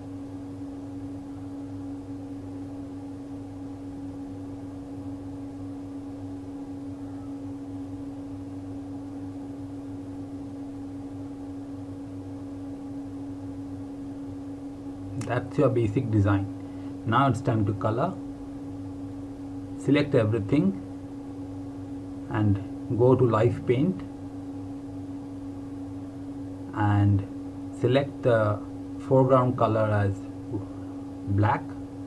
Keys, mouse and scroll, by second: 0.8-1.4 scroll down 1, 2.0 click, 2.7-3.6 scroll down 1, 4.0 click, 4.9 scroll up 1, 6.3-7.0 scroll down 1, 7.1 ctrl+scroll down 2, 8.2-8.5 scroll up 1, 9.0-9.3 scroll down 1, 9.9 ctrl+scroll down 2, 10.6 click, 12.0 ctrl+scroll up 1, 12.6 click, 13.7 scroll up 1, 13.9 ctrl+Num_Lock, 14.2 ctrl+KP_0, 20.2 click, 23.5 click, 31.6 a.